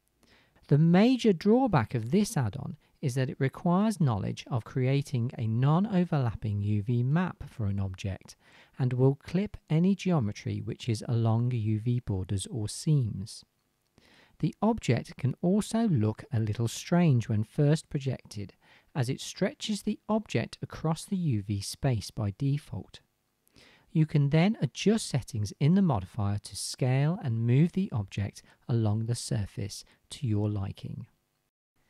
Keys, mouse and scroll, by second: 2.9 click, 2.9 middle click, 2.9 right click, 13.6 right click, 14.4-18.6 drag, 15.9-16.7 middle drag, 15.9-18.6 right drag, 18.6 shift+middle click, 22.8-27.6 shift+middle drag, 30.7-31.7 middle drag.